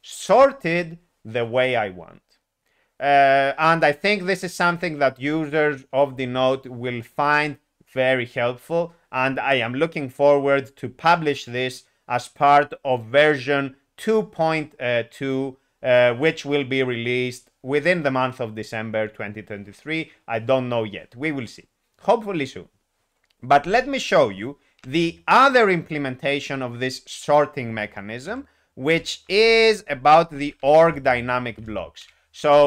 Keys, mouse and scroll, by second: 24.7 i, 28.2 ctrl+u, 28.9 ctrl+u, 30.2 ., 30.4 ., 30.5 ..